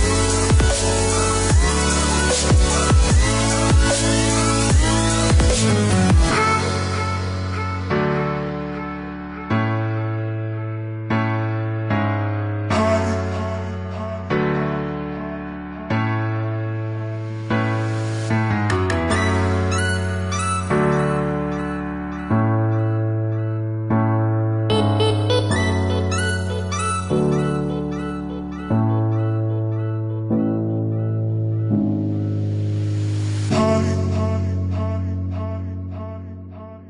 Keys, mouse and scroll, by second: 0.6 click, 2.8 click, 3.4 click, 4.0-5.7 scroll up 1, 5.7 click, 7.5 click, 9.6 click, 12.6 click, 15.9 click, 19.4 click, 22.7 click, 24.0 scroll down 1, 24.5-25.5 scroll up 1, 25.5-26.1 scroll down 1, 26.1 middle click, 28.1 click, 30.7 click, 32.8 middle click, 35.2 click.